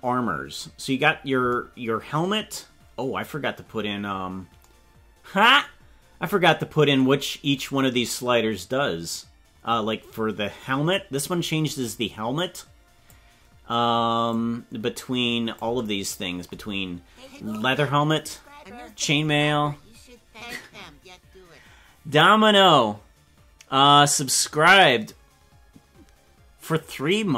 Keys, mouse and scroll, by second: 0.3 scroll down 2, 10.8-13.2 drag, 14.2-15.6 drag.